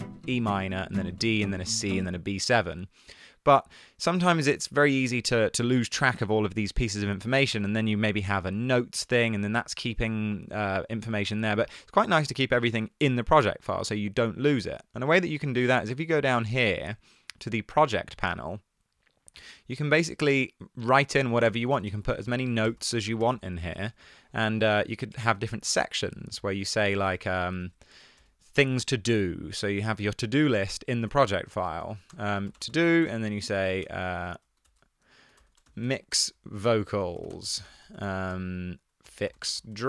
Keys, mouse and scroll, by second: 2.2 space, 9.6 super+q, 21.5 Return, 21.6 Return, 21.7 Return, 21.9 Return, 22.7-23.7 typing, 25.9 super+c, 26.4 Right, 26.6 super+v, 27.4 super+v, 27.7 super+v, 31.2 Return, 31.4 Return, 31.5-39.8 typing.